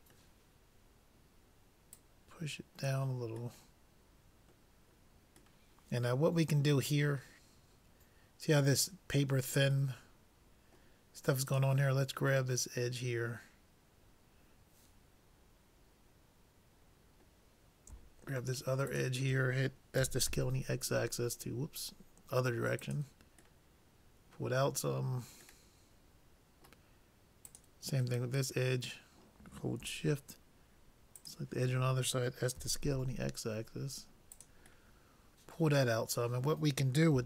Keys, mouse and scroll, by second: 2.0-3.8 drag, 3.6-5.4 middle drag, 5.7-7.7 middle drag, 10.1-11.7 middle drag, 11.5-13.3 drag, 12.5-14.4 middle drag, 18.9-20.8 drag, 20.0 s, 23.8-26.8 middle drag, 27.5-29.2 drag, 28.3-29.4 middle drag, 31.2-33.2 drag, 32.6 s, 35.0 middle click.